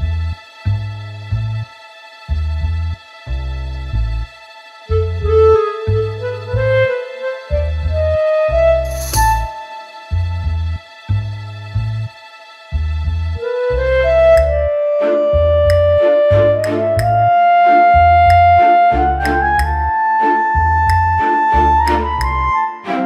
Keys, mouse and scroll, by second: 0.3 KP_7, 1.0 s, 1.7 g, 4.3 click, 7.5 typing, 8.5 click, 8.8 middle click, 10.0 middle click, 11.6 g, 14.7 click, 15.1 click, 17.8 middle click, 19.0 middle click, 19.5 middle click.